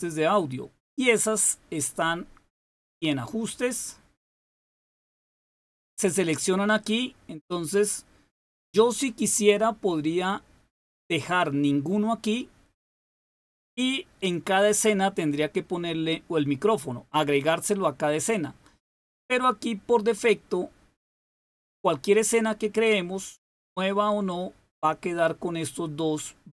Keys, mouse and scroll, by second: 1.2 click, 2.7 click, 5.9 click.